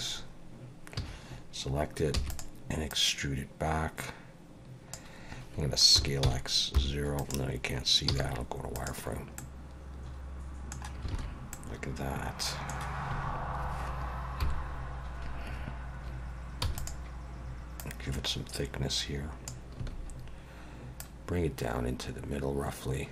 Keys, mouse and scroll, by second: 1.0 a, 2.2 e, 2.9 click, 5.9 s, 8.1 z, 9.4 middle click, 11.1 alt+a, 11.5 middle click, 13.1 a, 14.4 KP_7, 16.6 e, 17.8 click, 19.8 a, 20.2-20.8 scroll up 2, 21.0 click.